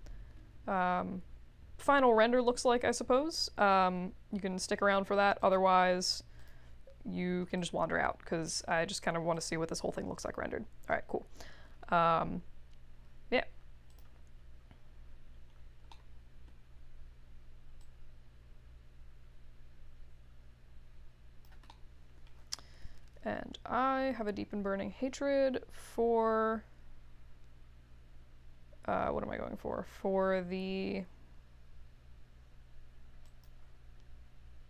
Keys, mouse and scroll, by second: 5.4 click, 6.3 click, 7.5-8.4 drag, 9.3 click, 13.8 click, 14.4-15.0 scroll down 1, 15.4 scroll up 1, 16.0 alt+middle click, 18.3-21.5 drag, 21.9-23.0 middle drag.